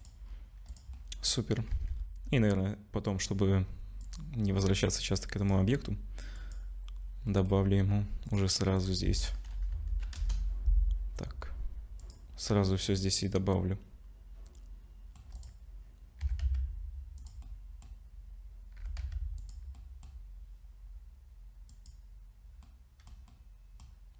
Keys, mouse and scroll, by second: 0.0 click, 0.3-0.8 scroll down 4, 0.7 click, 0.9 middle click, 1.7 ctrl+s, 1.9 scroll up 4, 3.1 click, 5.4 click, 7.3 middle click, 8.3 click, 8.8 click, 12.0 click, 12.7 middle click, 15.4 click, 16.2 s, 17.4 middle click, 18.8 g, 19.8 middle click, 21.7 click, 22.7 middle click, 23.3 middle click.